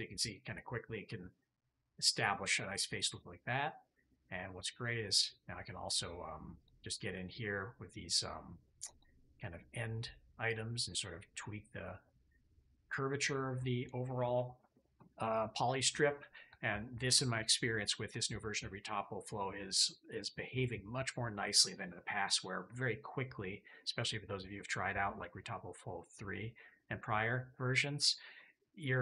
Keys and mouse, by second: 1.5-2.7 drag, 3.2 middle click, 4.1-6.5 middle drag, 6.5-7.7 middle drag, 7.7-10.4 drag, 12.2 click.